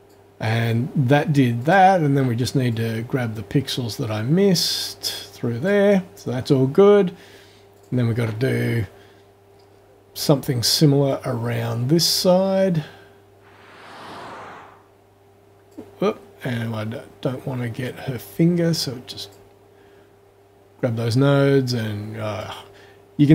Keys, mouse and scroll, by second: 0.0 click, 1.6 click, 2.7-5.8 drag, 7.8 click, 9.6-10.4 scroll up 2, 11.1-15.9 drag, 17.9-19.5 drag, 22.4-23.3 drag.